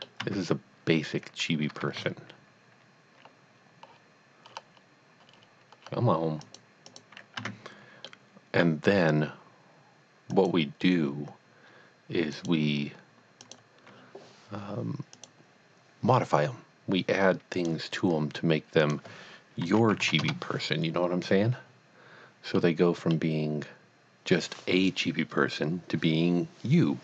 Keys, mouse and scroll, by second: 0.3 Tab, 2.0 ctrl+r, 3.9-4.5 scroll down 1, 4.6-5.1 scroll up 1, 5.5-5.8 scroll down 1, 5.8 scroll up 1, 6.5 click, 6.9 click, 7.4 Tab, 8.0 middle click, 10.3 click, 12.3 click, 14.1 click, 15.2 click, 17.5 click, 18.8 click, 19.8 KP_Decimal, 20.1 KP_5, 20.2 KP_Enter, 22.5 KP_Enter, 22.9 middle click.